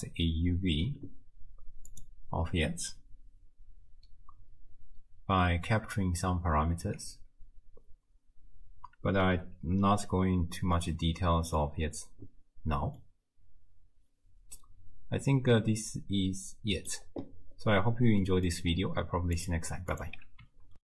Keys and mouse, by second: 1.9 middle click, 10.2 Tab, 10.8 click, 13.0-15.9 drag, 16.0 middle click, 16.5 middle click, 18.2 middle click, 19.4 click, 20.0 click.